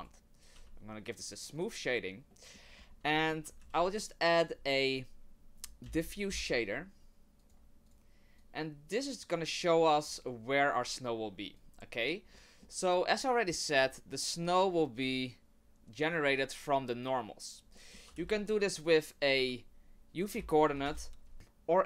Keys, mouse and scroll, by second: 0.0 right click, 0.5 w, 2.3 middle click, 2.7-3.1 scroll down 1, 3.1 middle click, 3.1-3.4 scroll up 2, 3.6 shift+a, 8.4 click, 11.6 click, 12.3 middle click, 17.7 middle click, 18.1 shift+a, 21.3 BackSpace.